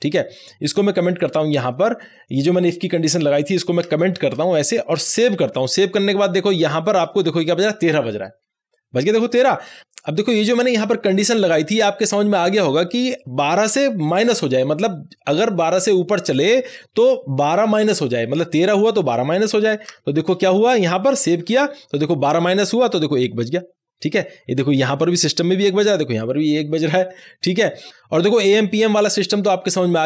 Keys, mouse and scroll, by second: 3.7 alt+Num_Lock, 4.1 alt+shift+a, 5.3 ctrl+s, 13.2-15.5 drag, 19.8 click, 20.1 alt+shift+a, 21.3 ctrl+s, 22.5 click.